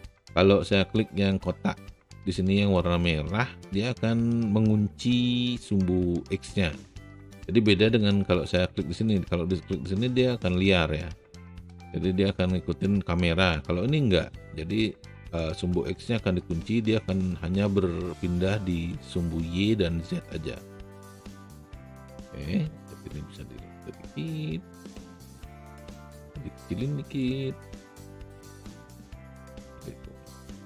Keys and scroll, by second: 26.3 r.